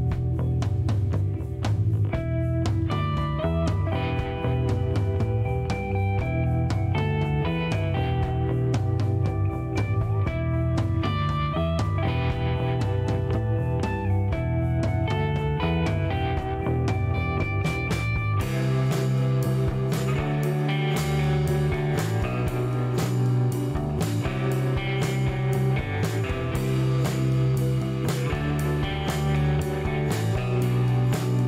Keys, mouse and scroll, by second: 2.9-3.9 scroll down 3, 5.5 click, 7.0 scroll up 2, 9.8 click, 11.4 click, 12.2 space, 13.3 click, 13.6 space, 15.7 scroll up 1, 16.2 middle click, 20.1 click, 21.3 shift+middle click, 22.0 middle click, 22.5 shift+right click, 25.3 ctrl+click, 26.6 click, 28.0-29.0 typing, 29.5 scroll down 2, 29.8 middle click, 31.0 middle click.